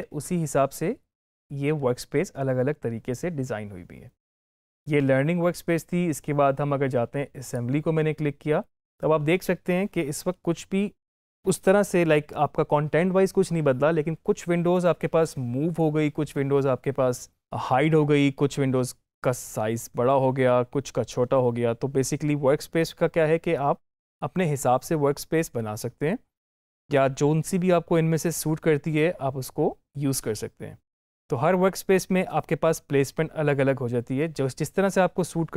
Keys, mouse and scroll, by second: 7.3 click, 23.9 click.